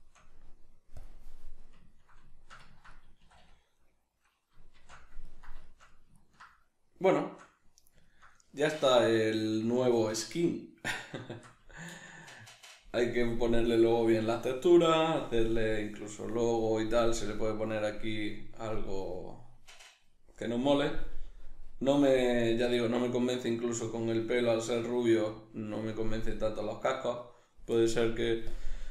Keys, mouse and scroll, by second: 1.0-1.6 drag, 1.6-27.0 ctrl+middle drag, 3.2 a, 4.8 shift+c, 27.0 right click, 28.5-28.9 drag.